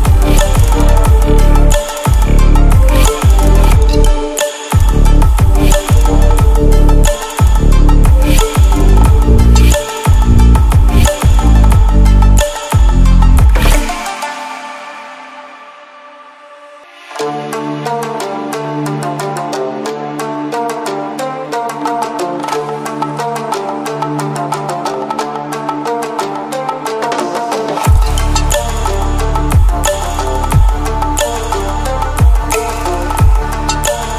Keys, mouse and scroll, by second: 2.0 click, 4.8 click, 7.5 click, 10.4 click, 11.7 typing, 13.0 click, 15.7-16.3 drag.